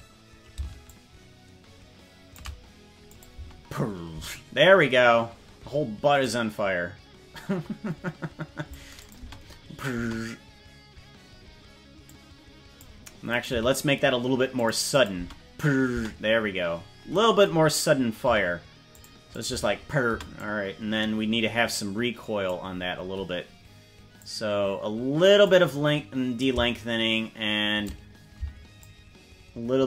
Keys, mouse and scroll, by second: 0.8-2.3 shift+drag, 3.1 click, 3.3 space, 4.1 space, 6.2-8.7 drag, 9.0 click, 9.1 space, 10.0 space, 12.0 click, 13.4 right click, 13.6 g, 14.9 click, 15.2 space, 16.0 space, 16.4-17.2 scroll up 10, 18.4 g, 19.3 click, 19.6 space, 20.2 space, 20.3-22.5 drag, 24.1-25.4 drag, 26.3-27.9 shift+drag, 28.7-29.8 shift+drag.